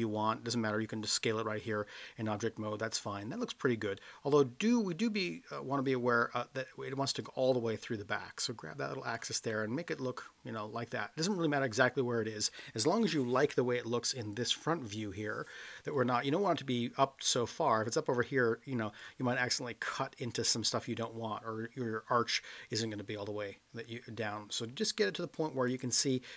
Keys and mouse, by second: 4.0-5.0 middle drag, 5.3-5.8 middle drag, 7.2-9.1 drag, 9.5-11.1 middle drag, 13.0 KP_1, 17.6-19.0 drag, 22.8-25.6 drag.